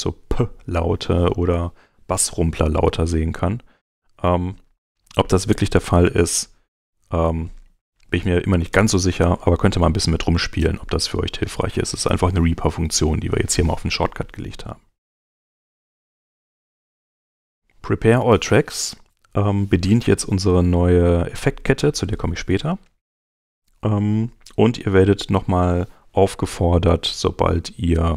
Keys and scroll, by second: 6.7 shift+super+h, 9.9 super+Tab.